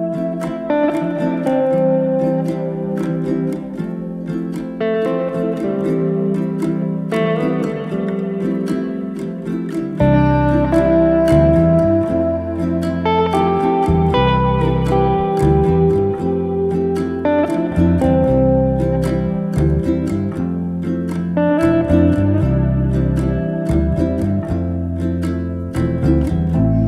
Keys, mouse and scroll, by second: 0.9-3.3 drag, 3.3 g, 5.9 click, 7.2 shift+a, 8.3-9.6 drag, 9.6 shift+s, 10.8 shift+a, 14.4 g, 15.8 r, 16.5-17.9 drag, 17.9 r, 22.0 r, 24.8 z.